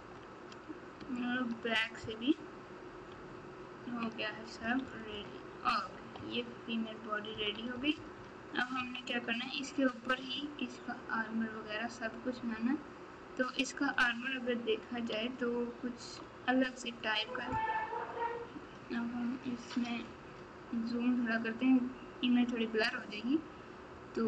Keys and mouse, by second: 4.6 KP_Subtract, 5.8 KP_1, 6.1 KP_3, 7.3 KP_4, 8.7 KP_1, 15.1 ctrl+Tab.